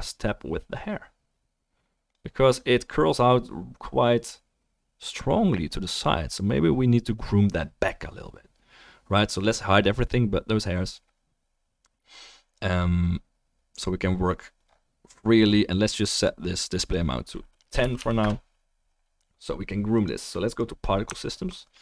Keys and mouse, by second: 2.9 click, 15.9 click, 21.1 alt+middle click, 21.3-21.8 alt+drag, 21.3-21.8 alt+right drag.